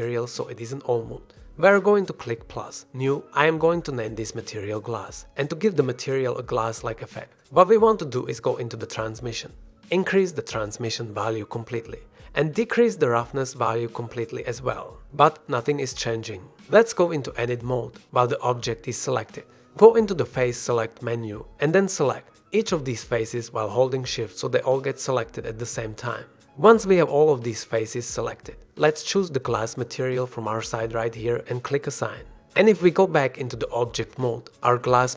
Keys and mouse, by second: 0.7 click, 1.2 click, 1.6 Tab, 2.7 click, 4.7 click, 8.1 s, 8.7-11.0 middle drag, 12.9-14.4 middle drag, 14.8-16.0 drag, 16.9 click, 19.6 click, 22.2 shift+click, 23.3 shift+click, 25.2 shift+click, 25.5 shift+click, 25.8 shift+click, 26.6 shift+click, 27.5 shift+click, 29.0 click, 31.5 click, 32.8-34.8 drag.